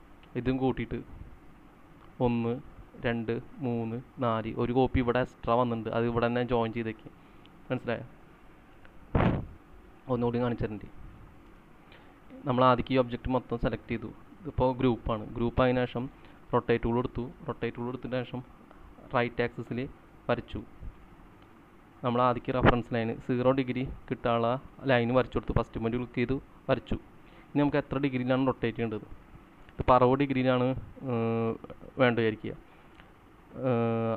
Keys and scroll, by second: 1.5 typing, 8.8 ctrl+z, 11.6 space.